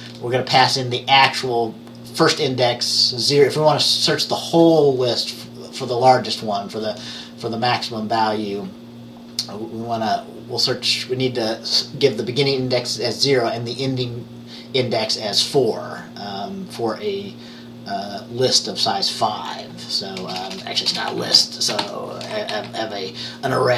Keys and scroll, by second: 20.3-22.4 typing, 22.6 Down.